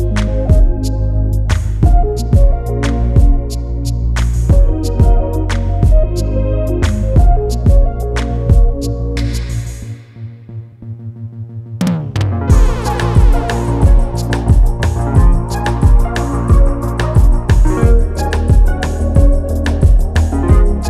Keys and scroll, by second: 1.2 ctrl+z, 2.6 space, 3.6 space, 4.9 space, 5.7 space.